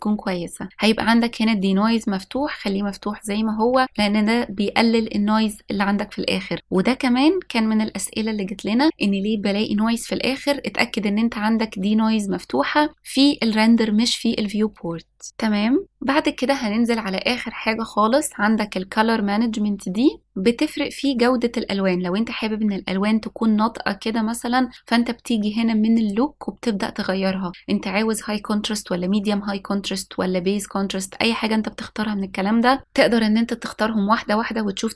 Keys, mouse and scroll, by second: 15.3-15.8 scroll down 1, 15.8 click, 15.8-16.6 scroll down 5, 16.6-17.3 scroll down 1, 17.3-19.5 scroll down 2, 25.9-34.9 drag.